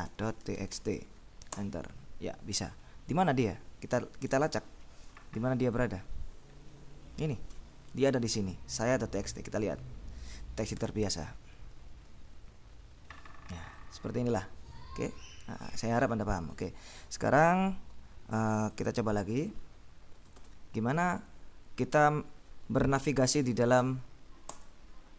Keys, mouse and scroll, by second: 0.0-1.4 typing, 1.6 Return, 4.6 click, 5.9 click, 6.6-7.1 scroll up 1, 9.2 click, 13.8-15.0 drag, 15.7 click, 16.7 click, 17.4 click, 19.0 click, 20.2 Escape, 23.9 a, 24.7 Return.